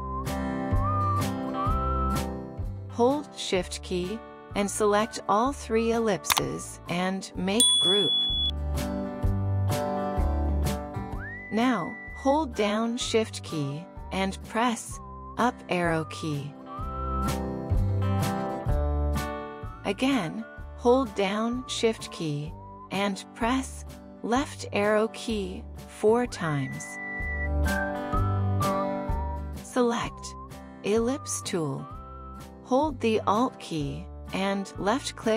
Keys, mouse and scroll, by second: 0.3 typing, 3.3 typing, 3.9 shift+click, 6.0 shift+click, 8.3 right click, 17.5 shift+Up, 25.6 shift+Left, 26.5 shift+Left, 27.0 shift+Left, 27.5 shift+Left.